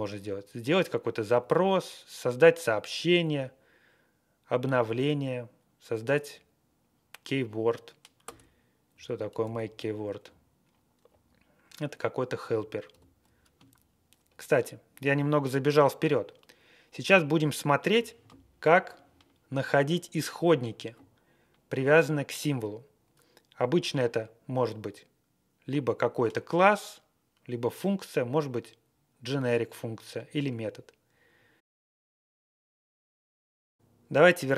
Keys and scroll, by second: 1.3 Up, 3.2 Up, 4.7 Up, 8.2 Return, 8.9 Left, 9.4 alt+., 10.2 Left, 11.0 Down, 12.9 alt+,.